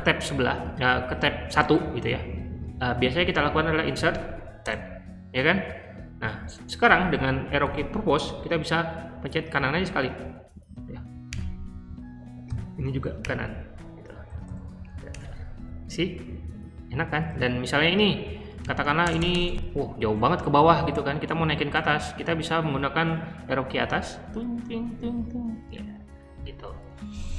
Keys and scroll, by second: 3.8 i, 4.5 Tab, 6.4 Escape, 7.5 j, 11.2 Right, 12.4 j, 13.1 Right, 14.2 typing, 15.0 Tab, 16.2-17.2 typing, 18.5-22.2 typing, 23.8 Up, 23.9-24.7 typing.